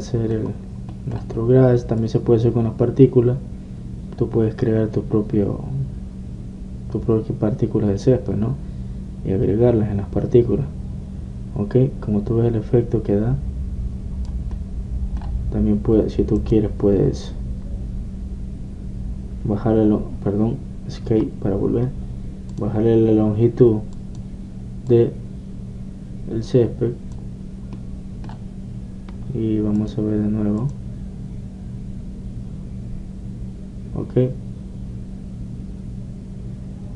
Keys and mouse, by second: 0.0 Escape, 3.2-5.1 drag, 15.7-20.0 middle drag, 23.7-27.9 drag, 28.9-30.7 middle drag, 30.9-33.6 drag.